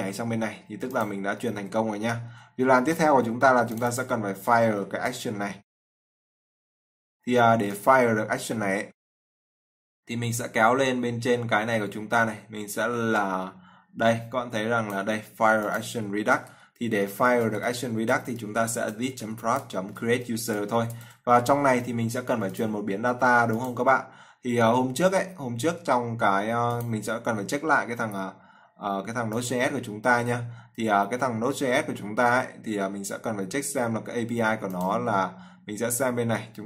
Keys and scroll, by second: 2.7 ctrl+s, 5.1 ctrl+c, 19.4 ctrl+v.